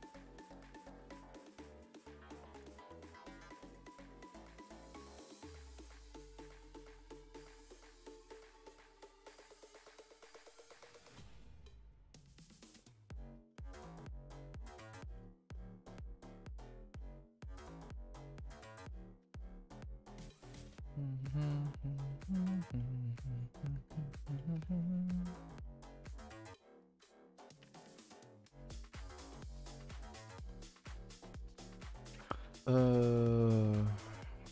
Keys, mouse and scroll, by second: 0.4 click, 0.4 g, 1.2 click, 1.3 g, 1.7 click, 1.7 g, 2.5 KP_0, 3.2-3.6 scroll up 1, 3.6 shift+middle click, 3.8 scroll up 2, 4.3 click, 4.3 g, 5.1 click, 5.2 g, 6.2 click, 6.2 g, 6.9 scroll down 1, 7.2 Tab, 7.5 shift+middle drag, 7.7 scroll up 1, 7.8 Tab, 8.2 click, 8.4 g, 9.3 Tab, 9.5 scroll down 1, 9.6 a, 9.7 a, 10.3 shift+middle drag, 10.5 scroll up 4, 10.7 Tab, 11.3 Left, 11.4 g, 12.5 Tab, 12.7-13.2 middle drag, 13.2-13.5 scroll up 2, 13.5-13.9 shift+middle drag, 13.9-14.6 scroll up 7, 14.2 shift+middle drag, 14.6 Tab, 14.9-16.2 shift+middle drag, 16.2-16.5 scroll up 4, 16.5-18.7 middle drag, 18.7 click, 18.9 middle click, 19.4 shift+click, 19.7 g, 20.7 click, 20.7 g, 21.5-23.6 middle drag, 23.6 click, 23.7 g, 24.3 middle click, 24.5 Tab, 25.2 click, 25.6 middle click, 25.9 Tab, 26.1-27.3 middle drag, 27.5 scroll down 2, 27.6 Tab, 27.9 middle click, 28.4 Tab, 28.6 Tab, 28.9-30.1 typing, 30.2 scroll down 5, 30.4 shift+middle click, 30.6 scroll up 4, 30.9 Tab, 31.2 scroll up 2, 31.5 shift+middle click, 31.8 a, 31.9 a, 32.4 2, 32.7 click, 33.2 shift+click, 34.0 middle click, 34.4-34.5 scroll up 9.